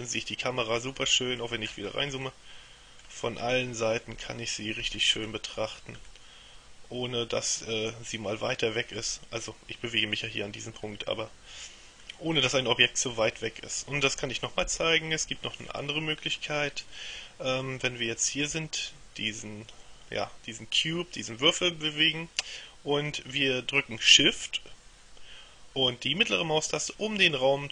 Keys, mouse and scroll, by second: 1.2-2.4 scroll up 2, 2.4 middle click, 3.6 middle click, 5.2-5.7 scroll down 1, 5.7-6.2 scroll up 1, 6.2 middle click, 11.2-12.6 middle drag, 12.6-13.2 scroll down 1, 13.2 scroll down 1, 14.8 KP_7, 15.7-17.0 scroll down 1, 17.8-19.0 shift+middle drag, 19.4 right click, 26.3-27.7 shift+middle drag.